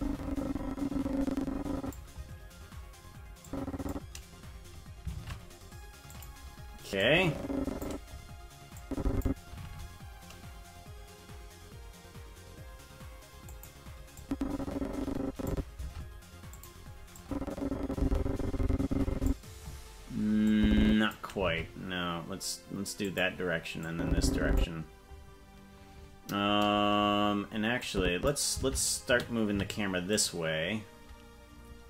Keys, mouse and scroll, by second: 3.4 click, 5.1 shift+`, 7.0 click, 8.8 click, 9.6 shift+`, 14.2-15.5 drag, 15.8 shift+`, 17.2-19.3 drag, 20.5 click, 21.6 shift+`, 23.8 click, 27.8 click, 28.6 shift+`.